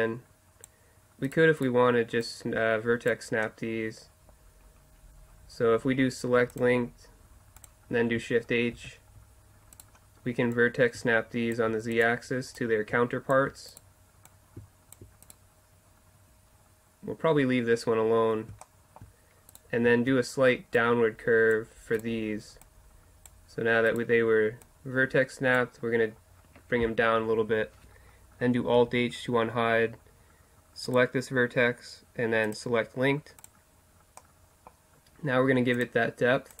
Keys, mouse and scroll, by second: 0.6 click, 1.3 right click, 2.3-3.8 middle drag, 3.4 click, 3.8 click, 3.9-6.6 middle drag, 8.8 shift+h, 10.5-11.6 middle drag, 11.9-18.2 right drag, 12.0 click, 12.6-16.9 drag, 18.7 middle click, 19.5-21.5 right drag, 20.8-22.6 drag, 22.0-24.3 right drag, 22.7-24.3 drag, 24.3-25.8 middle drag, 25.8-28.8 drag, 28.8 alt+h, 30.9 right click, 32.3 right click, 34.2 click, 34.3-35.8 middle drag, 36.0-36.6 middle drag.